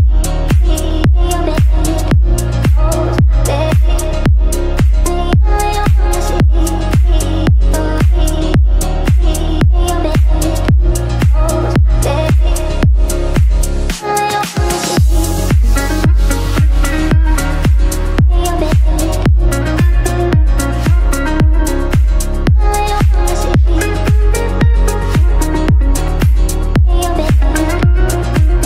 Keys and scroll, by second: 14.6 ctrl+q, 23.7 F9.